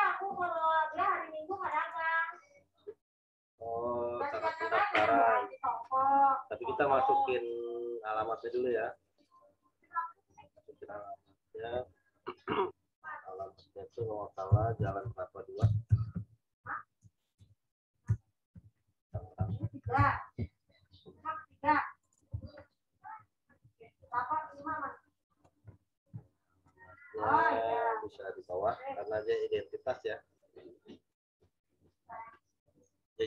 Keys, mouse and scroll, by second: 0.6 click, 11.0 click, 13.5 click, 14.2-20.3 typing, 22.0 click, 22.8 ctrl+t, 24.1 alt+shift+click, 26.1 Return, 26.7 click.